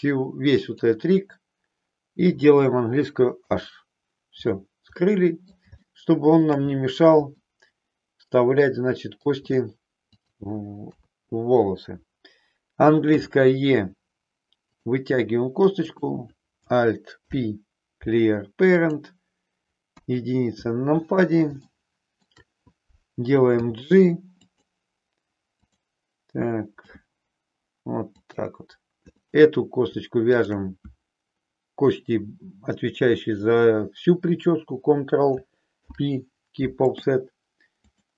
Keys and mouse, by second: 3.4 h, 4.9 middle click, 5.9 shift+middle click, 7.3-9.3 middle drag, 10.1 click, 10.8 KP_3, 13.0 e, 14.8 click, 15.9 click, 17.1 alt+p, 20.0 KP_1, 21.7 shift+middle click, 23.5 g, 24.5 click, 25.7 click, 26.8 g, 28.1 click, 29.1 click, 30.3 shift+click, 35.8 ctrl+p.